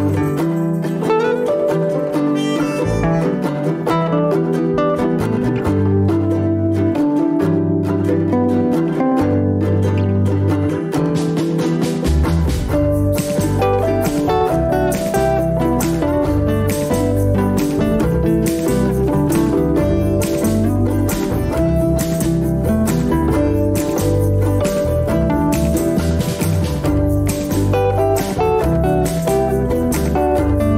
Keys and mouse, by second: 3.1 shift+middle click, 4.0 shift+middle click, 15.5 click, 18.1 shift+click, 19.6 shift+j, 19.8 shift+click, 21.1 ctrl+r, 27.4 ctrl+r, 29.1 shift+click.